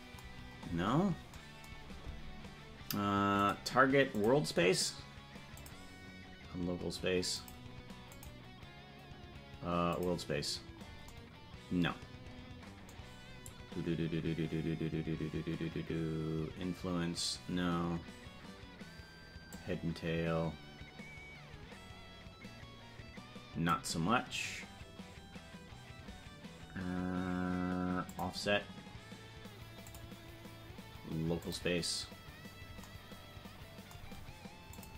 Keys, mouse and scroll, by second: 0.3-1.0 scroll down 15, 3.3 click, 5.5-7.5 drag, 8.0-10.0 drag, 19.5-23.7 drag, 28.1 click, 29.8-31.6 drag, 34.7-34.9 drag.